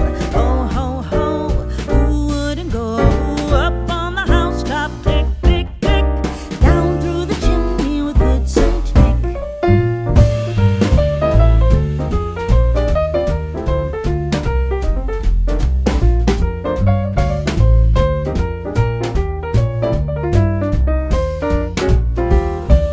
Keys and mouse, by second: 0.3 shift+middle click, 2.1 click, 4.4 click, 9.9 click, 10.5 middle click, 11.8 shift+middle click, 13.8 g, 14.1 x, 16.1 click, 17.5 shift+click, 18.1 ctrl+z, 19.1 shift+middle click, 20.1 typing, 21.6 click.